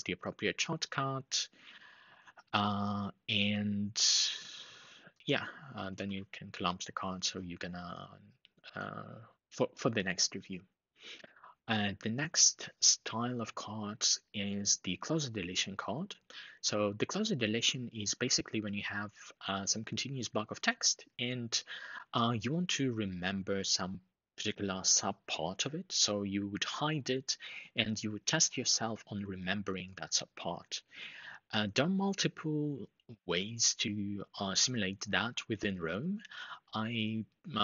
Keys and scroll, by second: 5.7 super+Up.